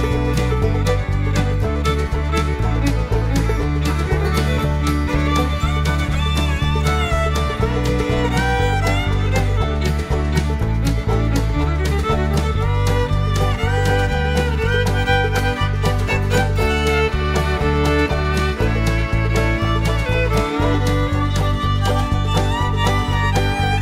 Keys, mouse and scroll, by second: 2.6 click, 5.6 click, 10.2 click, 11.6 click, 12.7 click, 13.4-15.1 typing, 16.0 click, 16.9-18.3 typing, 19.5 click, 20.2 click, 22.0 click, 23.1 0.